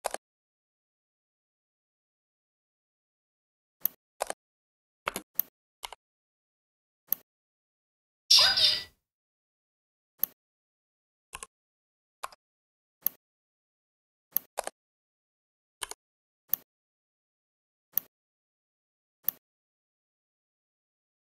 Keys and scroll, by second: 4.9 space, 12.1 Escape.